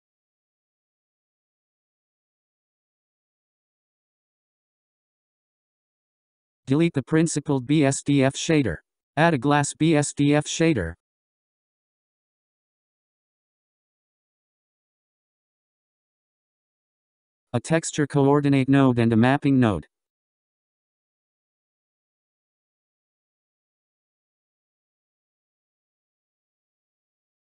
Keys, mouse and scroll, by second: 2.8 s, 6.7 click, 8.0 click, 9.3 x, 10.6 shift+a, 15.1-16.4 drag, 16.4-17.9 scroll, 17.9 click, 21.1 ctrl+t, 23.1 click, 23.4 click, 24.0 click, 24.9 x, 26.1-27.5 drag.